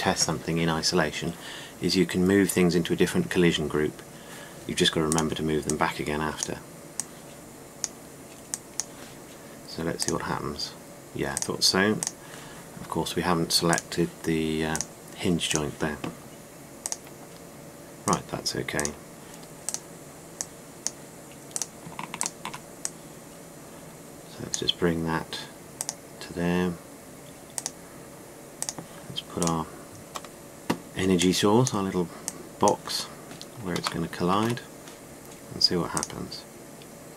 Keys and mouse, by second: 5.7-7.6 right drag, 18.5-20.3 right drag, 22.2 right click, 23.5-24.9 right drag, 24.9-25.5 drag, 26.7-29.3 drag, 30.6-30.9 middle drag, 34.7 middle drag, 36.7 click.